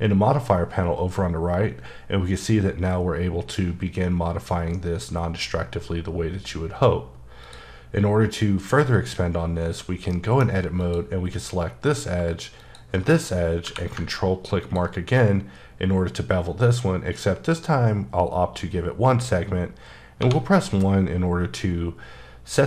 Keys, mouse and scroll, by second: 7.5 click, 8.1-8.8 scroll down 1, 8.8-9.6 scroll up 1, 10.1 middle click, 10.8 click, 13.6 q, 14.6 ctrl+click, 17.2-19.5 scroll down 4, 20.2 1.